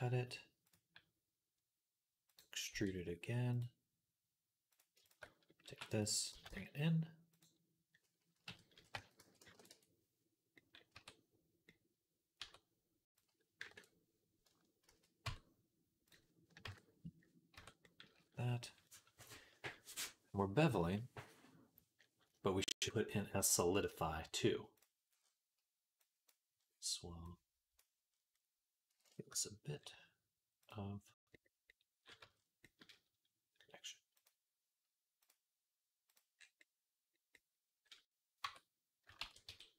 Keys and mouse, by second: 2.5 e, 4.5 click, 5.5 e, 6.2 g, 8.8 s, 9.2-12.9 middle drag, 9.5 Tab, 10.8 Tab, 12.2 Tab, 12.9-26.1 drag, 14.7 ctrl+z, 15.1 Tab, 17.4 Tab, 26.1 middle click, 27.0 click, 27.7-30.5 middle drag, 30.5-35.2 drag, 32.0 Tab, 35.2 middle click, 35.9-39.7 drag, 38.3 Tab, 39.0 ctrl+a.